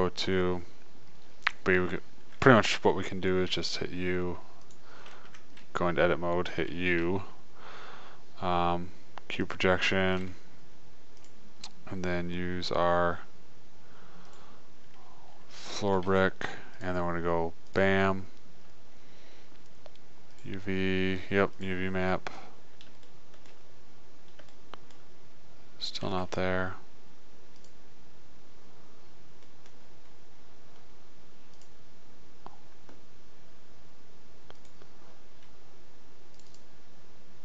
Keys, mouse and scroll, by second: 3.8 u, 5.8 Tab, 7.5 u, 10.6 middle click, 11.5-13.4 drag, 13.4-15.4 middle drag, 16.4 g, 17.9 middle click, 26.5 g, 29.4 middle click, 31.7 middle click, 31.9-33.7 drag, 34.9 click, 37.0 click.